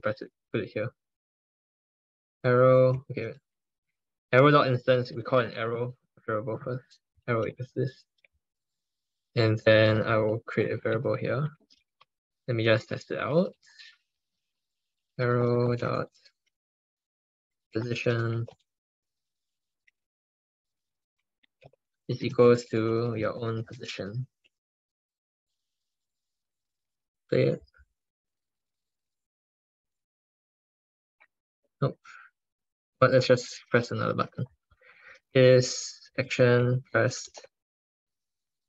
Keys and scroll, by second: 3.0 ctrl+BackSpace, 33.6 ctrl+BackSpace, 34.5 ctrl+BackSpace.